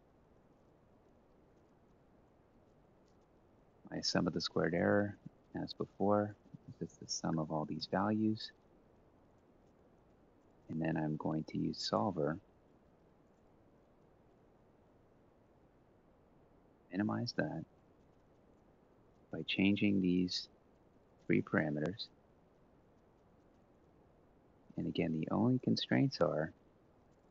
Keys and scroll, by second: 0.0 ctrl+c, 0.0 shift+Down, 0.3 ctrl+v, 1.4-5.2 typing, 6.6 ctrl+shift+Down, 6.8-7.5 typing, 14.0 BackSpace.